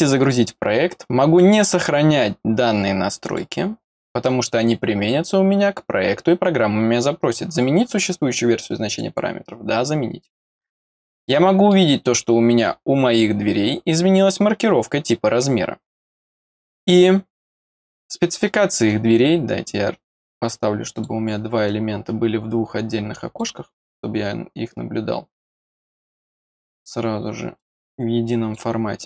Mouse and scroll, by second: 3.2 click, 8.8 click, 11.2 middle click, 17.3 click, 18.8-21.0 drag, 23.9-25.6 drag, 27.5 click, 28.9-29.0 drag.